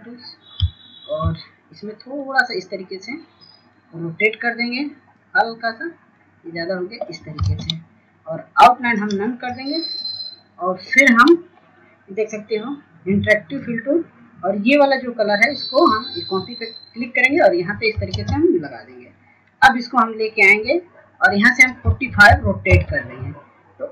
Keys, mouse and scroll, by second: 0.1-0.5 scroll down 1, 0.8 click, 3.1 shift+click, 8.7 scroll up 1, 9.5 click, 10.6 ctrl+space, 12.7 right click, 13.4 scroll down 1, 15.4 click, 21.3 ctrl+space, 21.6 scroll down 1, 22.7 click.